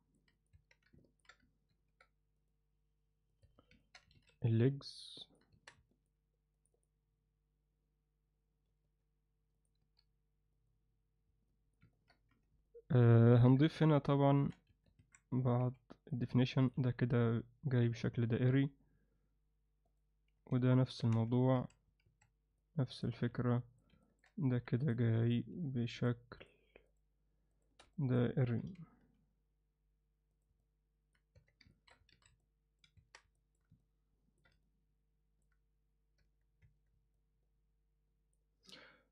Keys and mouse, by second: 0.4 click, 0.5 Tab, 1.0 ctrl+alt+middle click, 1.7 ctrl+r, 3.5 Tab, 3.8 ctrl+alt+middle click, 4.1 alt+a, 4.4-5.3 alt+middle drag, 5.5 Tab, 5.9 alt+middle click, 6.7 click, 8.7 g, 9.8 s, 11.5 alt+middle click, 11.9 ctrl+alt+middle click, 12.3 z, 12.6-13.0 alt+middle drag, 13.5 KP_7, 14.3 ctrl+alt+middle drag, 14.7 a, 15.6 c, 18.4 g, 20.3 z, 21.1 z, 21.5 a, 22.0 alt+a, 22.6 alt+middle click, 23.1 z, 23.4 alt+middle click, 24.0 ctrl+alt+middle click, 24.8 click, 25.3 shift+click, 26.0 shift+click, 26.4 shift+click, 26.9 shift+click, 27.5 shift+click, 27.9 alt+middle click, 28.5 g, 30.6 alt+middle click, 31.4 Tab, 31.7 ctrl+alt+middle drag, 32.1 alt+a, 32.4-32.8 middle drag, 33.0 Tab, 33.3 alt+middle click, 33.8 ctrl+alt+middle click, 34.6 alt+middle click, 36.2 Tab, 36.6 Tab, 37.1-38.3 alt+middle drag.